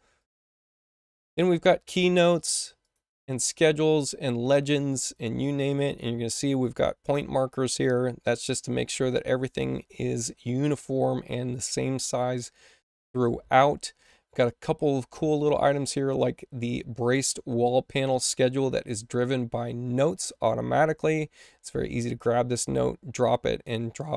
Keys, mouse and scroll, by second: 0.1 click, 0.3 click, 2.7 click, 3.2-4.7 scroll down 2, 4.7 click, 4.9 click, 14.3-15.6 middle drag, 15.6 click, 15.9 click, 19.0 click.